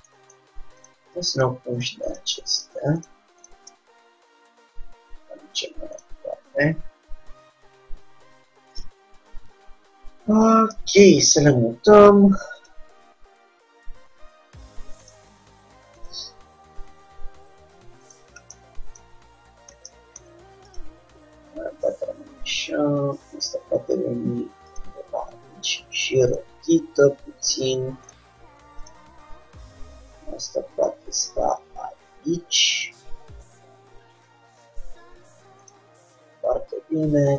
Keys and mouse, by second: 1.0-5.5 drag, 4.0 g, 6.4-8.9 middle drag, 8.9-10.6 drag, 9.4 g, 10.9 middle click, 11.6 r, 13.0 g, 16.1-18.0 drag, 16.4 g, 20.0-22.5 middle drag, 22.5 click, 25.3 r, 26.8 g, 29.0-30.8 drag, 29.2 g, 32.9-34.8 drag, 34.8-35.9 middle drag, 35.9-37.3 drag, 36.1 g.